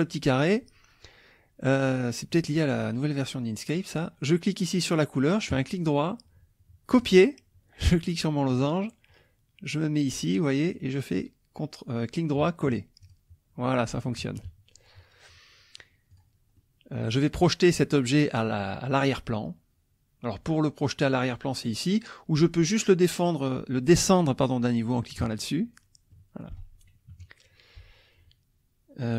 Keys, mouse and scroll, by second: 5.5 right click, 6.9 click, 8.5 click, 10.7 right click, 13.0 click, 14.2 -, 16.1 click, 16.6 click, 25.2 click, 26.1 click, 27.1 KP_Subtract.